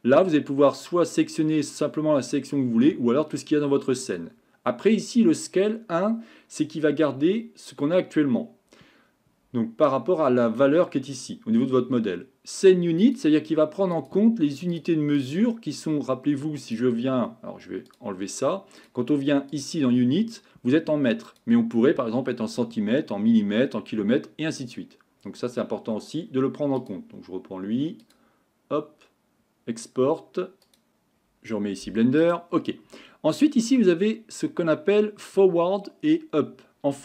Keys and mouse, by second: 18.8 click, 19.5 click, 21.3-30.9 drag.